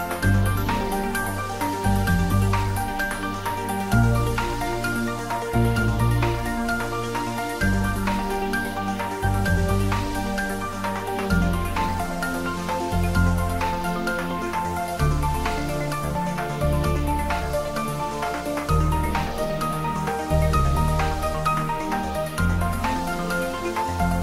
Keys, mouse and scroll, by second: 0.4-3.9 typing, 0.8 click, 4.0 Return, 5.3-7.2 typing, 6.2 click, 9.3 click, 10.9-13.3 ctrl+middle drag, 14.6 Tab, 16.1 s, 17.0 click, 17.4 Tab, 18.0 shift+z, 18.4-21.9 drag, 21.9-24.2 shift+middle drag.